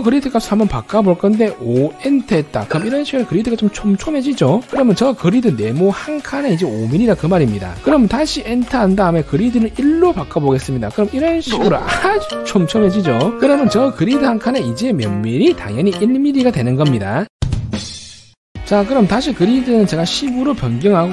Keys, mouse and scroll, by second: 2.0 5, 10.8 1, 18.6-20.2 typing.